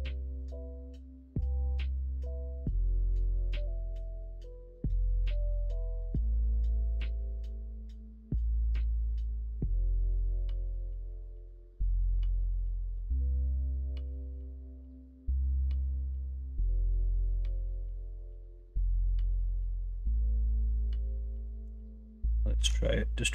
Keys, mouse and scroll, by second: 6.6-8.7 middle drag, 9.0 middle click, 10.1 ctrl+z, 12.9 middle click, 14.1 middle click, 14.6 middle click, 16.9 middle click, 17.6 middle click, 18.0 alt+z, 18.3 middle click, 20.0 q, 21.5 alt+z, 21.9 middle click, 22.5 ctrl+b.